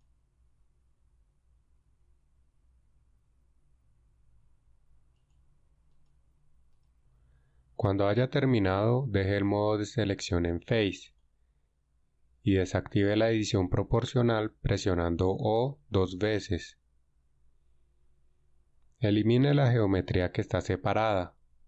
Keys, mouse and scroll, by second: 9.9 ctrl+Tab, 15.7 o, 17.1 o.